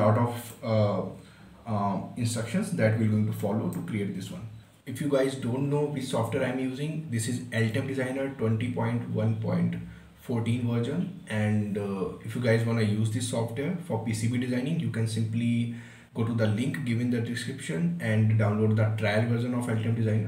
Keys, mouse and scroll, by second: 4.0 right click.